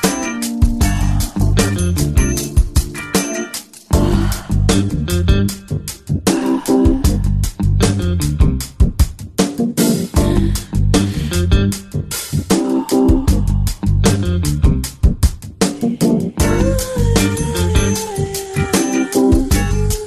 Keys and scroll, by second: 0.7 Return, 3.9 space, 18.8 space.